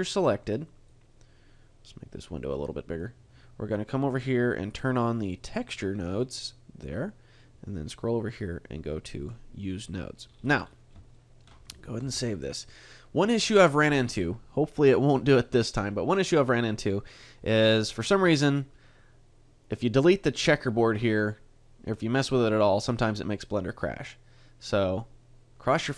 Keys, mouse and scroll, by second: 0.7 click, 3.2 click, 5.6 click, 6.6 middle click, 9.2 click, 11.8 shift+middle click, 11.8 scroll up 7, 12.0 ctrl+s.